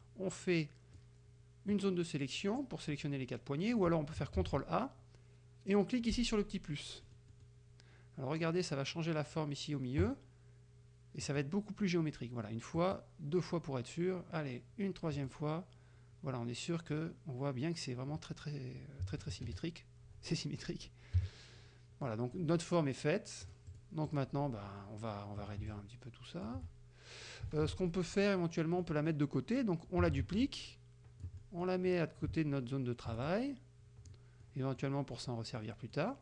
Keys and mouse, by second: 0.0-1.2 drag, 4.4 ctrl+a, 7.1 click, 11.3 click, 12.8 click, 15.2 click, 19.0 KP_Subtract, 21.2 KP_Subtract, 22.1 click, 23.5 click, 24.1 click, 25.7-26.7 ctrl+shift+drag, 27.7 ctrl+z, 28.0 ctrl+click, 28.9 click, 30.1 ctrl+d, 30.5-31.9 ctrl+drag, 31.4 middle click, 33.3 ctrl+shift+click, 34.5 middle click, 35.2 middle click, 35.7 middle click.